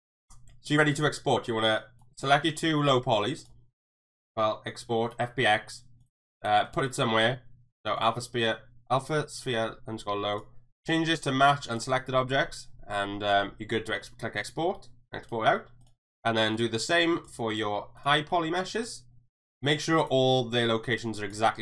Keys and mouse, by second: 2.0 click, 3.5-5.2 drag, 16.5 click, 16.8 click, 17.2 click, 17.5 click, 18.4 click, 19.8 click, 21.2 click.